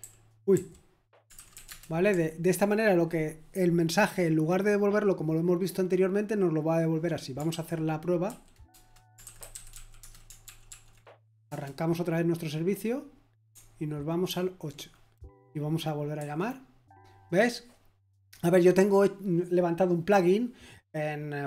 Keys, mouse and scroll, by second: 0.0-2.6 typing, 8.4-10.9 typing, 11.4 Return, 14.0-14.7 typing, 16.2 F5.